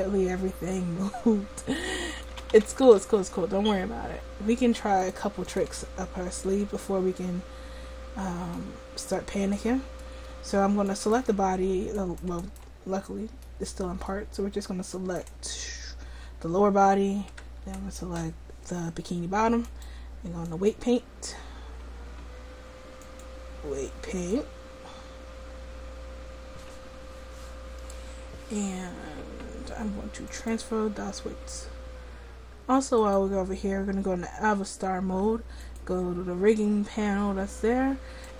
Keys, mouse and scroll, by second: 2.4 a, 2.6 a, 2.9 alt+r, 5.0 click, 6.4 middle click, 21.0 click, 22.7 click, 30.3-33.0 drag, 37.8 click, 38.1-38.3 drag.